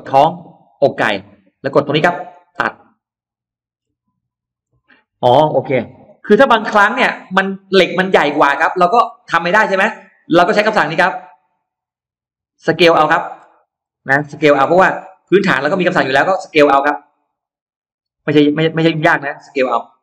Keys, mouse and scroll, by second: 0.9 click, 2.1 click, 3.0 middle click, 3.6-4.0 scroll down 2, 4.2 click, 4.5 middle click, 5.1-5.4 scroll down 1, 6.0 ctrl+z, 6.6 space, 6.7 click, 7.2 click, 8.2-9.4 middle drag, 10.8 ctrl+z, 11.7 ctrl+z, 12.0 click, 12.7 middle click, 13.2-13.5 scroll down 2, 13.6 scroll up 1, 14.5 s, 15.2 click, 17.2 middle click, 18.1 scroll up 2, 18.6 scroll down 2, 19.8 click.